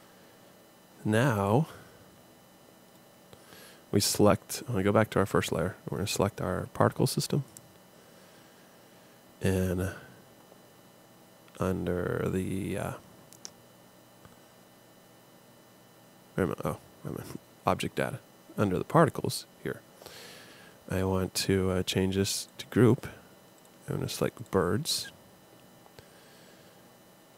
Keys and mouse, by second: 1.4 click, 2.2 middle click, 3.2-4.8 drag, 9.1-15.3 drag.